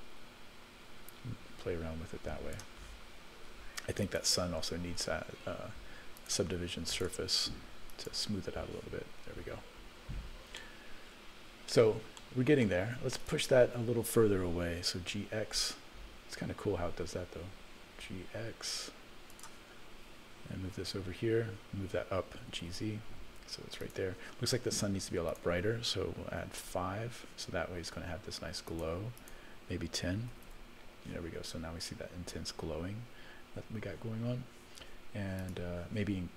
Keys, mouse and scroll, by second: 4.0 click, 6.1 click, 6.9-8.2 drag, 10.6 middle click, 11.2-11.7 scroll down 4, 11.7 middle click, 13.2 click, 15.0 g, 20.5 KP_0, 22.4 g, 25.2-26.8 drag, 28.7 click, 29.2-30.9 drag, 35.4 click.